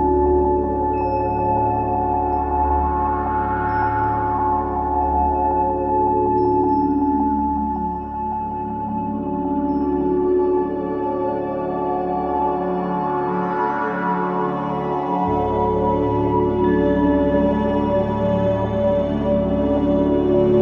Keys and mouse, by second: 1.0-1.9 ctrl+alt+middle drag, 3.4-4.1 alt+drag, 4.8 click, 5.1-5.8 drag, 8.1-9.2 alt+drag, 10.7-12.1 drag, 12.1 KP_5, 12.3 Return, 13.7 click, 14.0 space, 15.6 space, 18.1 click.